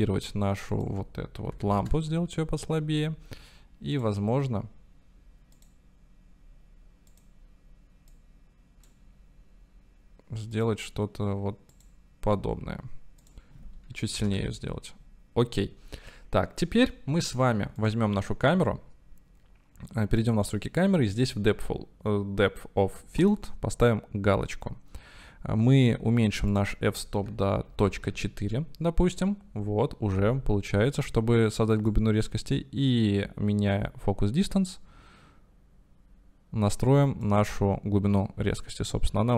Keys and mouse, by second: 0.8-3.4 drag, 4.0-4.5 drag, 5.7 click, 10.6 click, 13.2-15.5 drag, 18.1 click, 20.3 click, 21.2 click, 23.3 click, 26.5-30.6 drag, 32.1-37.6 drag.